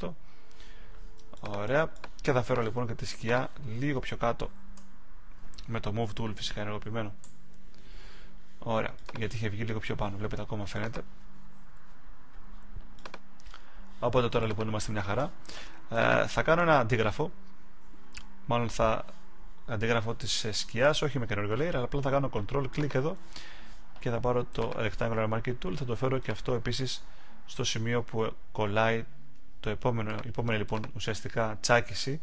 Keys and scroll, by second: 4.6 Down, 11.6 Down.